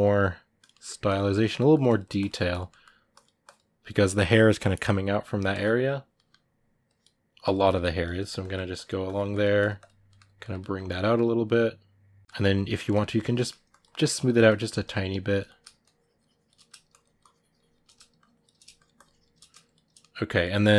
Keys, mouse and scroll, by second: 0.4 click, 0.5 middle click, 0.8 click, 1.3 middle click, 1.6 click, 2.5 middle click, 2.9-5.9 drag, 5.9 middle click, 6.6 click, 7.4 middle click, 7.8-9.9 drag, 9.9-12.2 middle drag, 12.2 shift+click, 12.7 shift+middle click, 12.9 shift+click, 13.1 middle click, 13.5 shift+click, 14.3 middle click, 14.6 shift+click, 15.2 middle click, 15.6 shift+click, 16.3 middle click, 16.7 shift+click, 17.6 middle click, 18.0-19.2 shift+drag, 19.2 middle click, 19.4 shift+click, 19.8-20.7 middle drag.